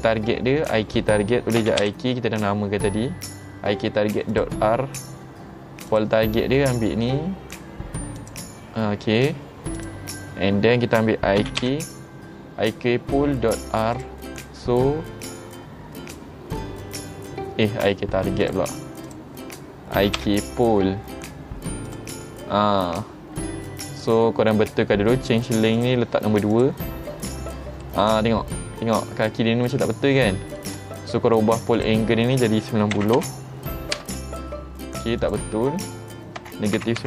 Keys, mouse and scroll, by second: 4.4 click, 6.0 click, 8.3 click, 9.8 click, 14.0 click, 18.5 click, 19.1 click, 21.9 click, 25.8 click, 26.6 click, 27.9-28.6 middle drag, 29.4 middle click, 30.3-30.6 middle drag, 31.8 click, 35.3 click.